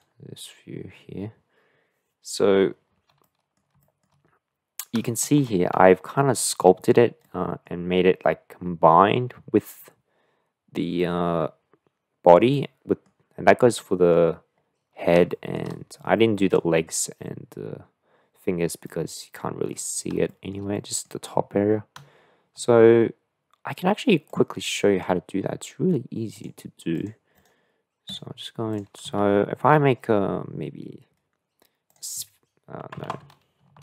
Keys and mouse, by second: 3.2 middle click, 3.9 shift+middle click, 5.1-5.4 shift+middle drag, 5.9 shift+middle drag, 7.2 middle click, 12.5-13.1 middle drag, 13.7 middle click, 15.3 shift+middle drag, 16.2-16.6 middle drag, 18.9-19.7 middle drag, 20.3 shift+middle drag, 20.7-21.1 middle drag, 27.0 click, 28.7 click, 29.3 shift+a, 33.1 ctrl+z.